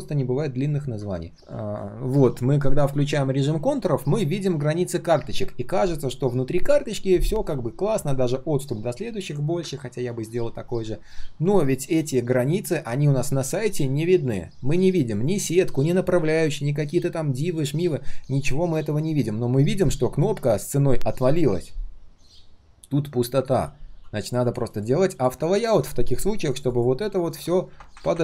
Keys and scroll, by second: 1.4 ctrl+shift+3, 10.7 ctrl+shift+3.